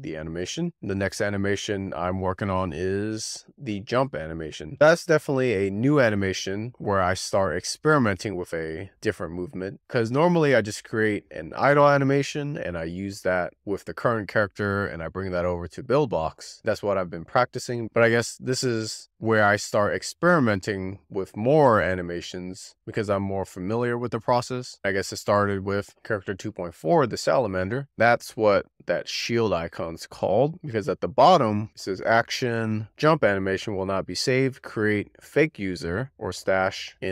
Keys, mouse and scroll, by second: 2.0 click, 3.2 click, 8.0-8.7 scroll down 1, 11.9-14.5 drag, 16.6-19.7 drag, 19.7 BackSpace, 20.6 x, 22.5-25.2 drag, 25.6-27.4 drag, 29.2-30.8 drag, 30.8 Return, 32.3-37.1 drag.